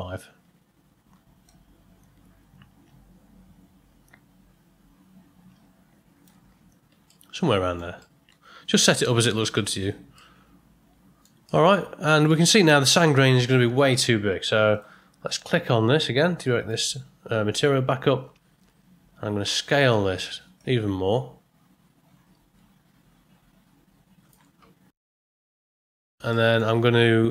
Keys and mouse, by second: 1.4-6.2 shift+drag, 7.1-7.7 shift+middle drag, 8.0-8.8 ctrl+middle drag, 10.1-11.2 middle drag, 11.4 ctrl+middle click, 16.4 middle click, 20.7-24.3 shift+drag, 25.5 middle click, 26.4 middle click.